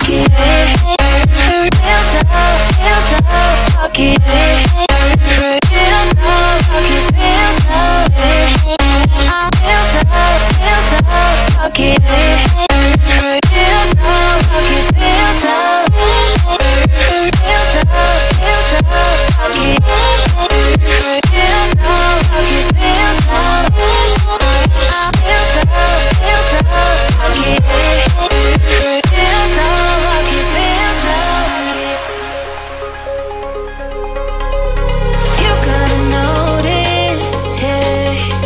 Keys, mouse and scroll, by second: 0.0 middle click, 1.4 click, 1.8 space, 1.9 middle click, 2.4 scroll down 1, 3.6 shift+middle click, 4.3-5.0 scroll up 1, 5.0 click, 5.5-6.0 scroll up 1, 6.1 click, 6.5 scroll up 1, 6.8 shift+middle click, 7.2 middle click, 8.6 click, 10.5 right click, 11.3 click, 11.9 middle click, 12.3 shift+middle click, 13.2-13.6 scroll up 1, 14.0 click, 15.1 p, 15.4 click, 16.3-17.1 typing, 17.5 Return, 18.2 click, 21.2 space, 21.4-21.7 scroll down 1, 21.7 click, 22.1 middle click, 22.4 scroll up 1, 23.0 shift+middle click, 23.7 click, 24.2-24.5 scroll up 1, 24.6-26.2 middle drag, 26.1 scroll down 1, 27.1 m, 27.2 click, 28.7 Right, 29.8 click, 29.8 click, 29.9 space, 30.5-31.3 scroll down 1, 31.3 middle click, 31.3 middle click, 32.0-32.6 scroll up 2, 32.6 shift+middle click, 33.3 scroll up 1, 34.4 m, 35.2 click, 36.7 Left, 37.0 scroll down 1, 38.3 scroll up 1.